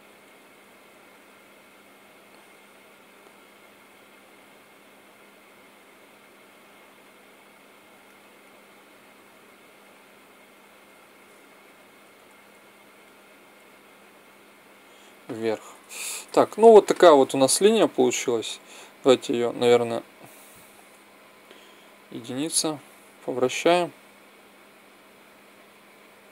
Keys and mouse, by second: 8.5-10.3 right drag, 9.6-11.4 drag, 15.9 Tab, 18.6-21.1 drag, 21.1 ctrl+z, 21.6 KP_1, 22.4-24.3 drag.